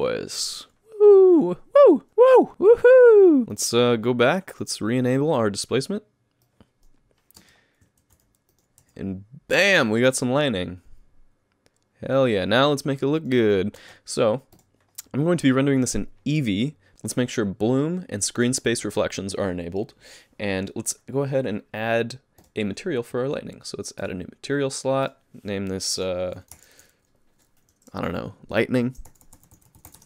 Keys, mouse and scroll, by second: 3.5 alt+a, 3.5 click, 4.5 click, 6.4 click, 7.4 space, 8.0 alt+a, 8.5 click, 8.8 g, 13.8 space, 14.5 click, 15.9 click, 22.4 click, 24.0 click, 25.0 click.